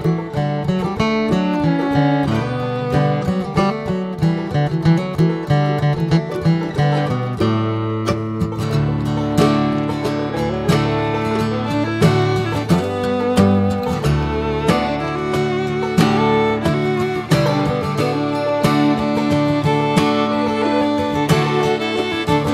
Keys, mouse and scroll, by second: 0.4 Tab, 0.5 drag, 0.8-1.7 middle drag, 1.7 click, 6.8 click, 7.0-10.1 middle drag, 10.1-13.2 drag, 13.2 scroll down 1, 13.4-19.5 middle drag, 19.5-19.8 drag.